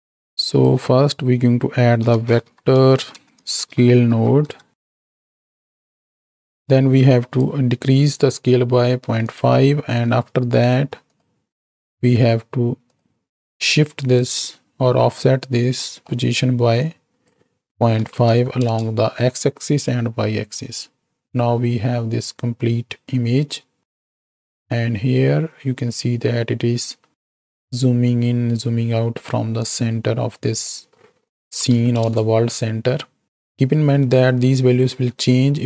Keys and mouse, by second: 0.0 x, 0.4-5.7 drag, 6.5-8.5 drag, 9.8 click, 10.3 shift+d, 11.7-13.0 drag, 13.7 click, 15.7 middle click, 16.8-18.7 drag, 24.7-31.2 shift+drag, 31.3 click.